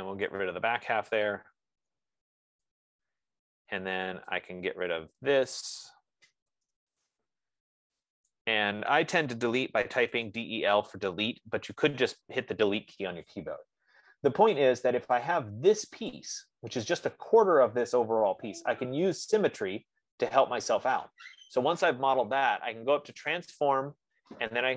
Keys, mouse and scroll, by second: 0.7 right click, 1.3-2.0 typing, 3.2 Return, 5.9 click, 6.6-7.5 typing, 8.8 click, 10.3 Delete, 13.3 right click, 14.2-14.6 scroll, 15.1-15.6 scroll, 16.6 click, 19.0 F15, 19.5-20.0 scroll, 24.1 click.